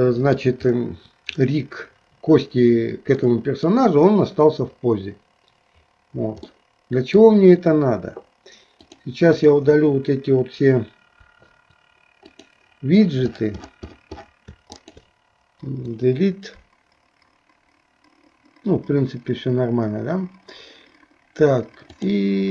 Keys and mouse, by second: 3.4 middle click, 6.5 middle click, 8.9 click, 12.3 click, 14.8-16.9 shift+drag, 21.9 click.